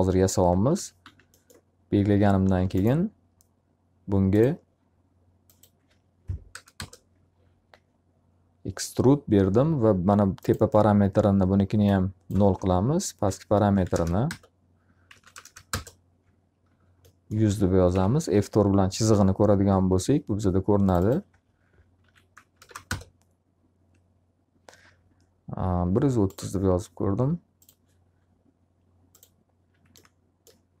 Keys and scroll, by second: 0.3 d, 1.0 z, 6.0 0, 6.7 Return, 13.2-15.8 typing, 14.2 Return, 17.9 F4, 21.7 1, 22.5 0, 22.8 Return, 30.3 f.